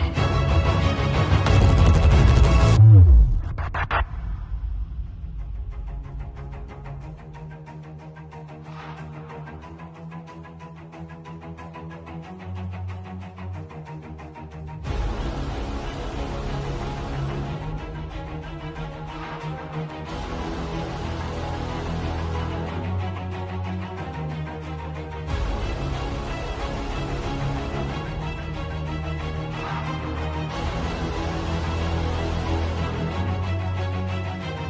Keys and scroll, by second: 0.1 super+g, 0.5-1.8 typing, 3.6 space, 4.8 z, 9.5 Delete, 16.7 b, 17.3 ], 18.5 x, 21.2-22.4 typing, 23.5 [, 24.4 [, 29.8 v.